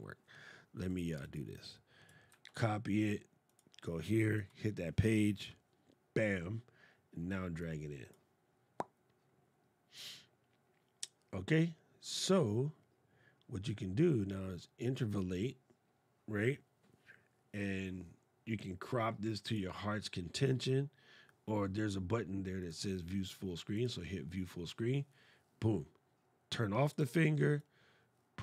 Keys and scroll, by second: 2.0 super+c, 4.1 super+v.